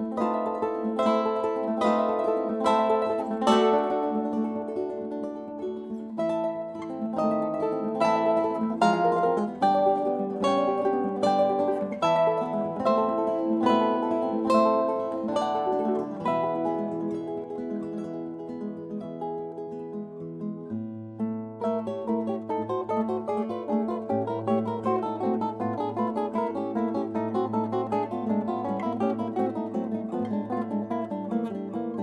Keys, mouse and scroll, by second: 3.1 KP_1, 3.6 KP_3, 5.8-8.5 drag, 9.6-15.4 middle drag, 15.4 g, 25.1 g, 30.8 g.